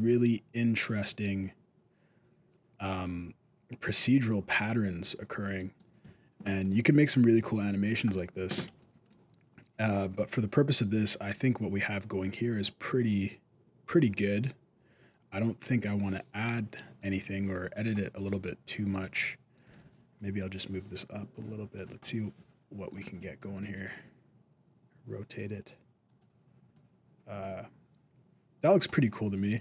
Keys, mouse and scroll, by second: 6.4 middle click, 7.1 middle click, 7.6 alt+a, 7.9 right click, 8.3 scroll up 2, 8.6 shift+middle click, 10.5 middle click, 10.5 scroll up 1, 11.5 middle click, 16.8 right click, 17.1 scroll down 1, 17.3 middle click, 18.2 g, 19.0 middle click, 19.4 g, 22.0 middle click, 23.0 middle click, 23.4 r, 26.9 middle click, 28.4 scroll down 1, 28.7 middle click, 29.4 alt+a.